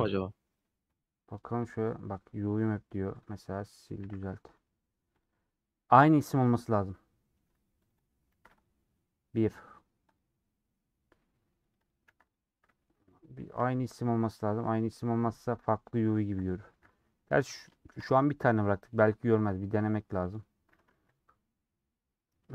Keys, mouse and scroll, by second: 0.9 click, 7.9-12.6 drag, 12.6 middle click, 12.8-13.3 scroll up 1, 13.3 click, 13.8 click, 17.2 middle click, 18.0 ctrl+shift+e.